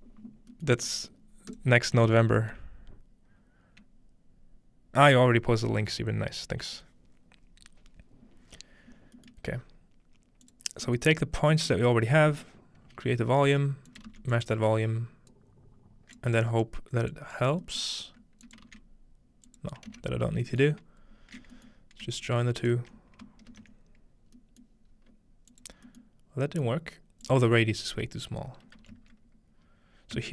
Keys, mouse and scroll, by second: 0.8 scroll up 1, 1.5 click, 9.3 middle click, 9.5-10.4 scroll up 2, 10.4-10.9 drag, 12.4-13.2 middle drag, 13.5-15.3 middle drag, 13.9-16.2 shift+drag, 14.1 shift+d, 15.3-16.9 right drag, 17.1 click, 18.5 click, 18.7 shift+d, 19.4-21.5 shift+drag, 19.9 shift+x, 20.3-20.8 scroll down 1, 20.7 middle drag, 22.4 right click, 23.3 ctrl+right click, 23.5 space, 24.4-26.5 middle drag, 24.9-25.5 scroll up 1, 25.5-28.8 drag, 25.5-28.8 scroll up 1, 26.7-28.8 middle drag, 29.1 typing, 30.2 Return.